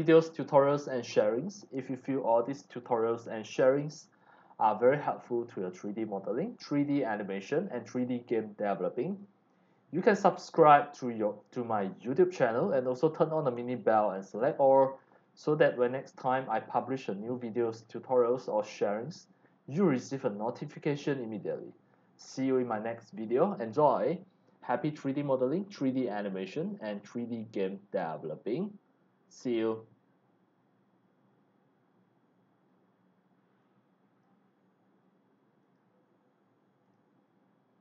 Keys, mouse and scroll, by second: 0.0 click, 0.7 scroll down 1, 1.3 scroll down 1, 1.8 z, 1.9-3.4 drag, 2.3 c, 4.2 click, 5.5 click, 6.3 x, 6.4 click, 6.9 c, 7.5-8.0 scroll up 2, 9.1 click, 10.0 scroll down 2, 10.1 scroll up 1, 10.1 scroll down 1, 10.2 scroll up 1, 10.6 x, 10.7 click, 12.6-13.3 drag, 13.5 scroll down 1, 13.9 scroll up 1, 14.4 x, 14.4 click, 14.8 c, 15.2 click, 15.9 middle click, 16.2 x, 16.3 click, 17.3 click, 17.8 scroll up 1, 18.1 scroll down 1, 18.5 x, 18.6-19.7 drag, 18.8 c, 20.6-22.3 drag, 20.6 c, 23.2 click, 26.3-26.9 drag, 27.3 click, 33.6 click, 35.6 click, 36.8 click.